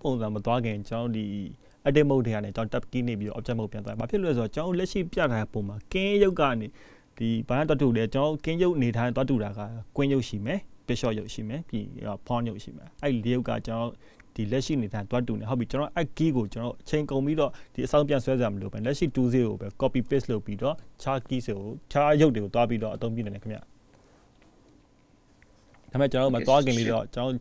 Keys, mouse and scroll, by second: 0.2 shift+d, 12.1 shift+d, 26.6 click.